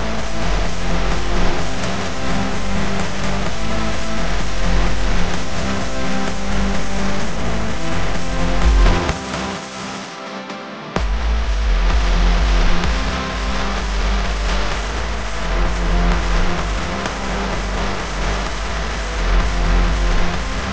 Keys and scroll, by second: 3.2 super+x, 5.5 super+f, 9.5-12.3 typing, 13.7 space, 14.2 space, 14.3 space, 14.4 space, 15.4 p, 17.2 space, 17.7 space, 19.6 space.